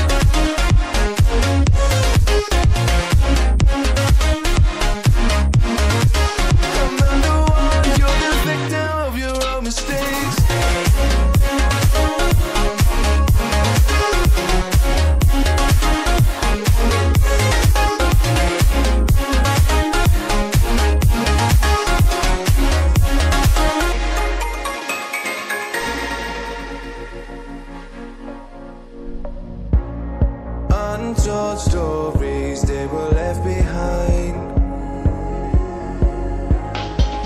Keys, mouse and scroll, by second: 2.7-3.2 scroll down 1, 3.3 shift+click, 5.6 right click, 6.2 click, 10.8 click, 13.5 double click, 14.8 click, 19.2-20.1 scroll up 1, 20.1 click, 23.0-23.4 scroll down 1, 23.4 click, 23.9-25.5 scroll down 1, 25.6-27.1 scroll up 1, 27.1 click, 34.5 double click, 35.9 scroll up 1, 36.3 click.